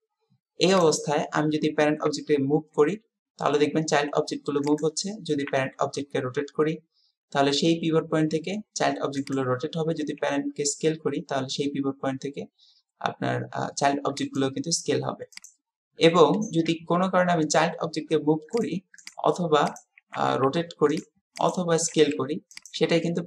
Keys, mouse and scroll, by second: 0.8 click, 2.1 g, 5.5 r, 10.0 s, 16.7 g, 19.1-19.4 right drag, 20.1 r, 21.9 s.